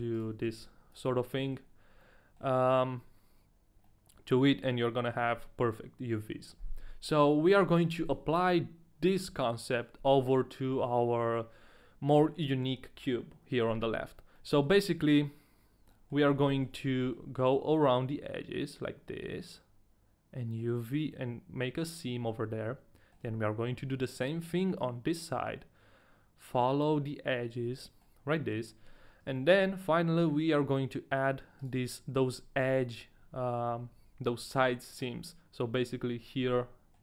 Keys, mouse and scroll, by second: 0.3 alt+shift+right click, 0.7 ctrl+e, 0.7 alt+shift+right click, 1.1 a, 1.3 middle click, 2.0 middle click, 3.8 middle click, 4.8-6.9 scroll down 1, 7.0 middle click, 14.3 middle click, 15.9 middle click, 16.7 shift+middle click, 16.7 scroll down 1, 17.0 middle click, 17.2-18.9 scroll up 1, 22.6 middle click, 27.8 middle click, 28.1-29.2 scroll up 1, 29.6 shift+middle click, 29.6-30.8 scroll up 1, 31.6 right click, 36.5 middle click.